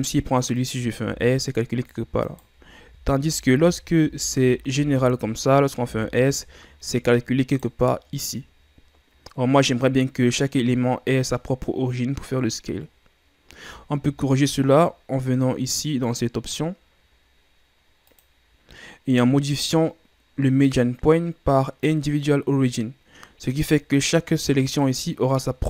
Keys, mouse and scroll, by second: 0.2 shift+right click, 0.7 shift+right click, 1.2 s, 3.0 ctrl+z, 3.4 ctrl+z, 3.7 ctrl+z, 4.2 ctrl+z, 6.0 s, 14.2 ctrl+scroll up 3, 18.3-21.4 drag.